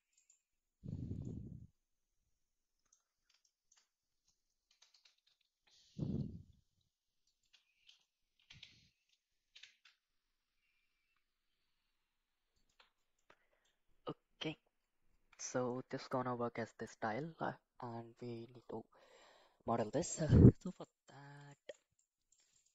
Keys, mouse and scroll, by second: 0.2 click, 1.2-2.9 middle drag, 3.4 shift+middle drag, 4.7 g, 8.3 g, 13.2-13.6 middle drag, 15.4 shift+middle click, 15.9 middle click, 20.5 shift+middle drag, 20.8 middle drag, 21.5 shift+middle click, 22.0 middle click, 22.5 click.